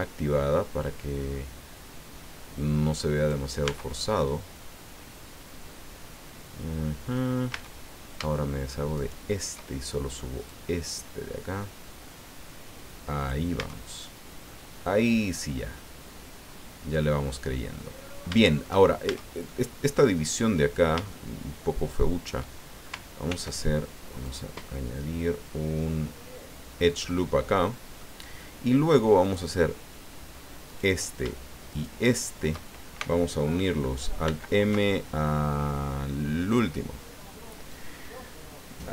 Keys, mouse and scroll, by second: 0.0 scroll down 1, 0.6 scroll down 1, 3.7 Tab, 4.3-7.4 drag, 7.5 Tab, 9.0 shift+right click, 10.5-13.5 drag, 13.6 Tab, 14.0 scroll down 1, 14.4-17.9 drag, 18.4 shift+click, 19.1 shift+Tab, 19.5-20.9 shift+middle drag, 20.9-22.4 shift+drag, 23.2 ctrl+r, 24.2 click, 26.8-28.2 drag, 29.2 click, 30.6 right click, 31.7 shift+right click, 34.3 alt+m, 36.5 click, 38.0-38.9 middle drag.